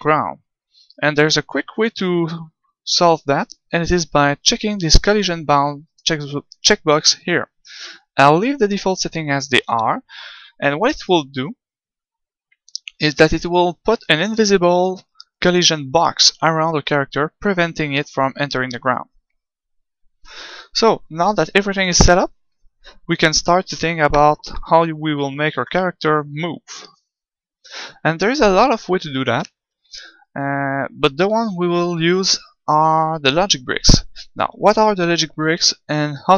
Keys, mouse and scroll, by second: 11.0 g, 13.0-14.8 drag, 23.3 middle click.